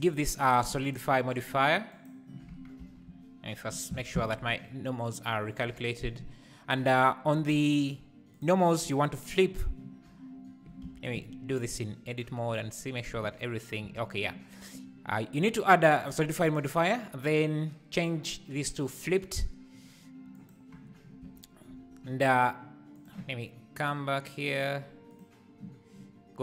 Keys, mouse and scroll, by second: 2.0-2.5 drag, 2.5 Tab, 2.8 a, 3.7 shift+n, 4.1 Tab, 8.3-9.3 drag, 10.9 z, 13.2 z, 13.9 z, 21.3 z, 23.8 click, 24.4 click, 25.1 click.